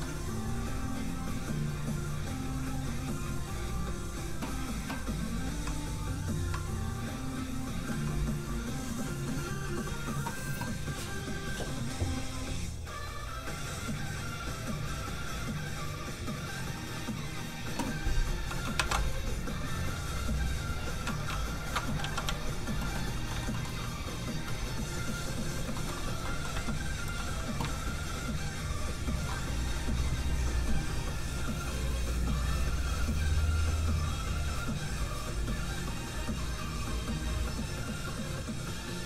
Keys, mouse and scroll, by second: 0.8 click, 5.5 a, 7.3 scroll down 1, 8.2 click, 10.2 scroll down 1, 18.1 click, 18.7 shift+a, 19.4 click, 19.5 click, 21.4 ctrl+shift+click, 22.0 shift+click, 22.1 z, 23.3 shift+middle click, 24.3 shift+click, 24.9 click, 24.9 g, 25.3-25.6 scroll up 1, 25.7 shift+middle click, 25.9 scroll up 1, 26.2 middle click, 26.5 z, 28.0 ctrl+shift+click.